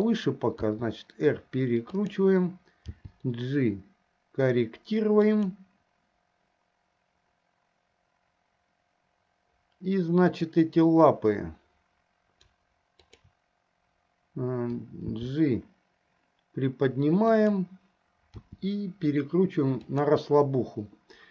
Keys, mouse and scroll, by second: 0.8 r, 3.1 g, 10.3 click, 13.1 shift+click, 15.2 g, 18.5 r.